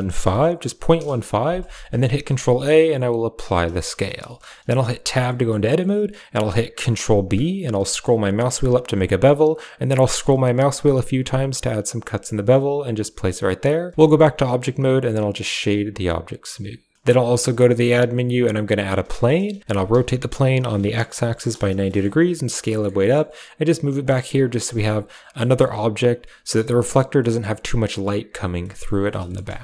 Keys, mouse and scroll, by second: 2.0 ctrl+a, 3.7 shift+middle drag, 4.2 shift+middle drag, 5.0 Tab, 5.2 middle click, 5.7 middle click, 6.9 ctrl+b, 13.9 Tab, 13.9 click, 14.2 w, 17.4 click, 17.6 shift+a, 19.1 middle drag, 19.6 r, 21.8 drag, 22.1 s, 22.7 click, 22.9 g, 24.0 click, 24.6 drag, 24.9 s, 25.3 drag, 27.1 middle drag, 27.5 middle drag, 28.5 middle drag, 28.7 click, 29.2 shift+middle click, 29.4 middle click.